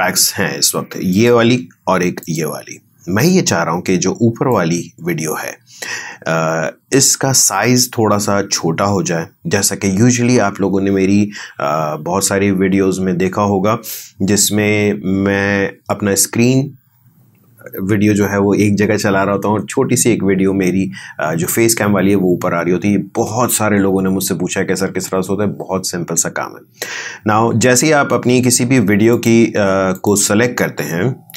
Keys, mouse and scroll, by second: 29.1 click.